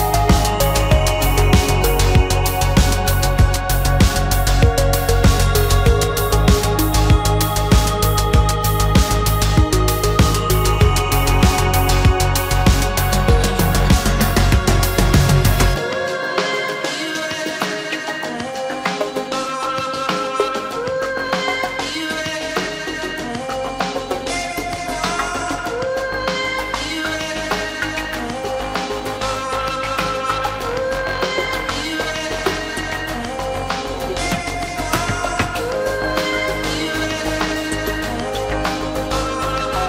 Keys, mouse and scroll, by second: 6.0 space, 8.1 shift+middle click, 13.4 shift+middle click, 14.8 shift+middle click, 23.2 shift+middle click, 23.8 shift+middle click, 25.0 shift+middle click, 28.4 shift+v.